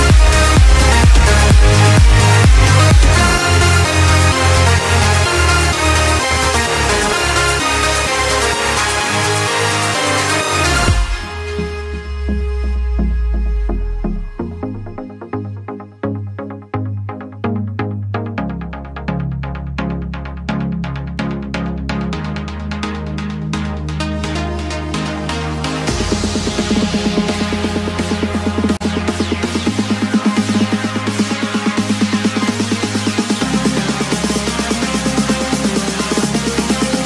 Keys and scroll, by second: 1.7 ctrl+g, 4.7 ctrl+space, 5.8 space, 6.4 ctrl+space, 7.0 space, 7.7 ctrl+space, 8.3 space, 12.1 F7, 12.5 ctrl+space, 12.8 ctrl+space, 14.0 n, 16.6 ctrl+space, 16.8 ctrl+space, 17.0 x, 17.5 x, 18.8 x, 19.7 space, 22.1 x, 24.4 z, 26.1-27.6 typing, 28.3 ctrl+z, 32.8 space, 33.4 space, 33.9 ctrl+z, 34.3 ctrl+-, 35.1 ctrl+space, 35.7 x.